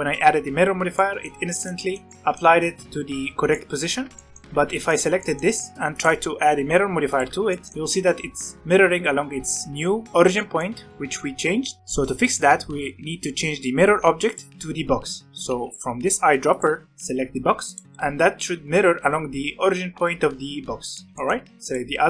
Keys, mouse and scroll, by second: 1.0-4.5 middle drag, 4.5 alt+a, 4.8 click, 5.2-5.9 shift+middle drag, 5.9-7.5 drag, 7.5-10.1 shift+middle drag, 10.3-12.4 shift+middle drag, 14.2 click, 16.4 click, 20.9 middle click, 21.1 alt+a, 21.1-21.6 middle drag, 21.6 click.